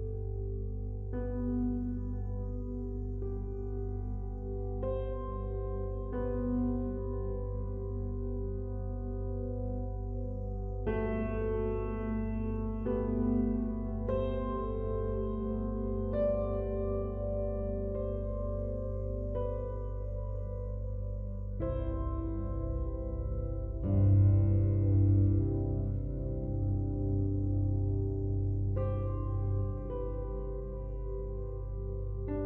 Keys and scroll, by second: 30.5 ctrl+t.